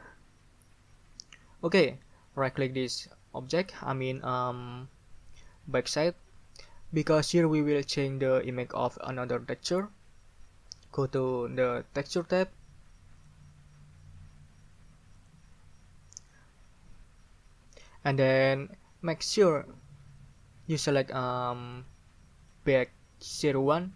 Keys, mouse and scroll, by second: 1.9 right click, 2.4 right click, 2.5 middle drag, 3.0 middle drag, 3.4 middle click, 13.2 click, 15.1 click, 21.6 click, 22.4 middle click.